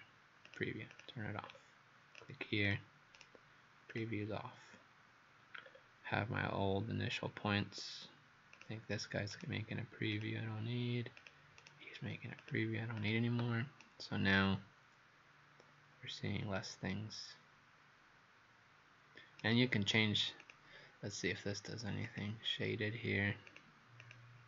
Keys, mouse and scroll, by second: 0.5 click, 0.9 click, 1.5-2.2 scroll down 2, 2.2 click, 2.7 click, 3.2 right click, 3.9 click, 5.7 scroll down 2, 7.5 scroll down 1, 8.6 click, 9.4 right click, 10.1 click, 11.6 right click, 12.4 click, 13.0 click, 13.8 right click, 20.4 click, 24.0 click.